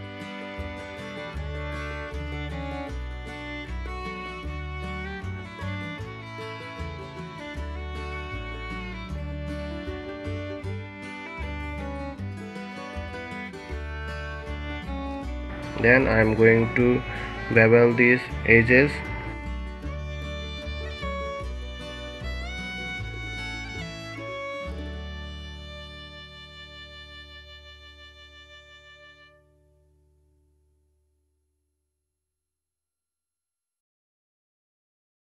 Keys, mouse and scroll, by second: 0.8 middle click, 1.5 scroll down 2, 1.8 middle click, 2.0 scroll up 2, 2.3 middle click, 3.0 alt+click, 4.0 alt+shift+click, 4.5 s, 10.1 click, 10.3 scroll down 2, 10.4 middle click, 10.6-10.9 scroll up 1, 11.2-11.7 scroll up 1, 15.1 alt+shift+click, 15.6 alt+shift+click, 15.9 alt+shift+click, 16.3 alt+shift+click, 16.6 alt+shift+click, 16.9 alt+shift+click, 17.5 alt+shift+click, 17.7 alt+shift+click, 18.3 alt+shift+click, 19.1 ctrl+b, 21.3 ctrl+shift+click, 21.4 ctrl+z, 22.1 shift+click, 22.4 middle click, 23.8 shift+click, 24.0 shift+click, 24.5 shift+click, 24.7 shift+click, 25.0 shift+click, 25.5 shift+click, 25.8 middle click, 26.6 ctrl+b.